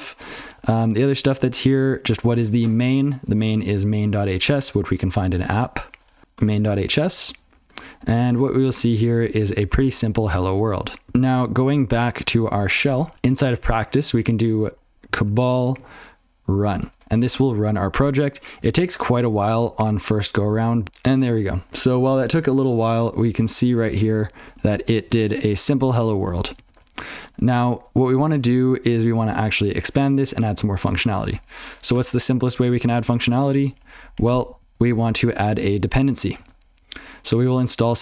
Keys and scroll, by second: 34.0 alt+x.